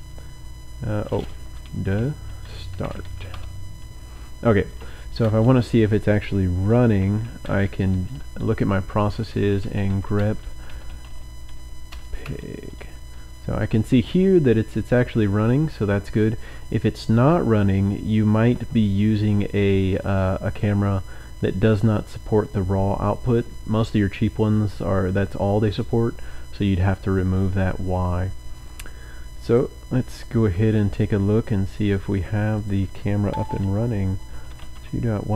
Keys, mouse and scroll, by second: 1.4-5.5 typing, 7.3-8.1 typing, 9.3-12.7 typing, 19.9 click, 28.8 click, 29.4 click, 32.5 click, 34.0-35.3 typing.